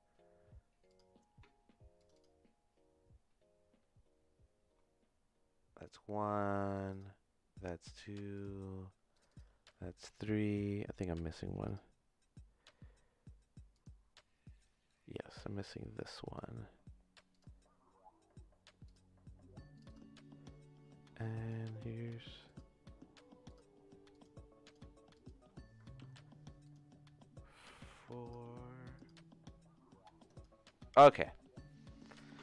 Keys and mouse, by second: 8.3 click, 13.8-28.4 drag, 29.0 click.